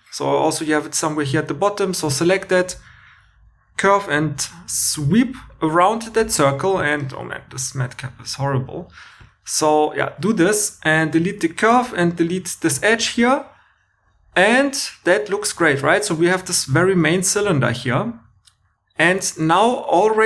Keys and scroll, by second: 3.0 super+z, 4.3 shift+r, 4.8 shift+r, 11.1 x, 11.8 shift+e, 12.7 x.